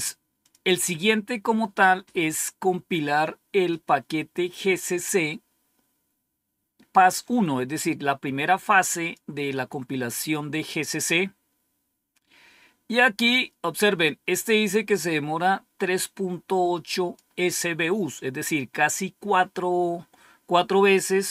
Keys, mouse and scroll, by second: 0.3 click, 7.1-9.8 drag, 14.5-17.1 drag.